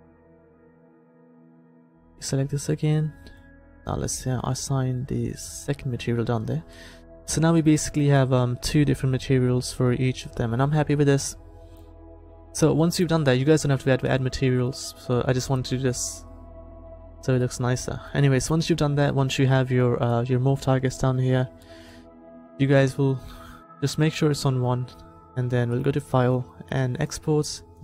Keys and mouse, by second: 1.0-4.4 middle drag, 1.9 c, 5.7-7.2 middle drag, 7.2 Tab, 10.2-11.9 middle drag, 12.8-14.2 middle drag, 14.2-16.1 drag, 17.5-18.7 middle drag, 20.1-22.6 middle drag, 25.7-27.7 drag.